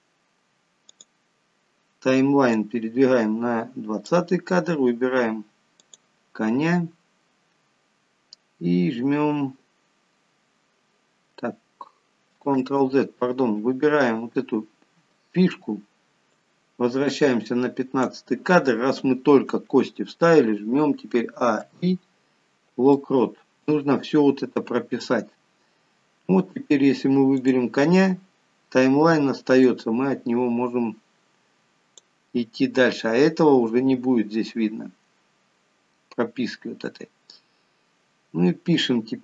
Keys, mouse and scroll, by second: 1.1 click, 2.8 click, 6.0 click, 12.9 ctrl+z, 16.6 click, 21.6 a, 21.9 i, 27.6 click, 29.9 click, 37.9 scroll down 2.